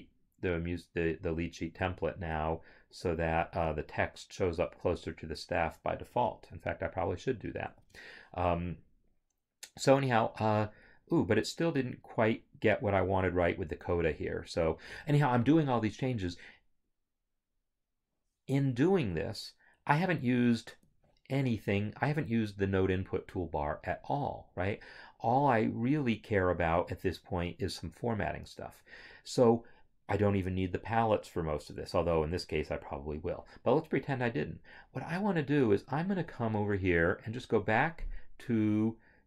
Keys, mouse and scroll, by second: 7.8 ctrl+z, 12.8 click, 19.3 double click, 20.6 Escape, 36.3 click.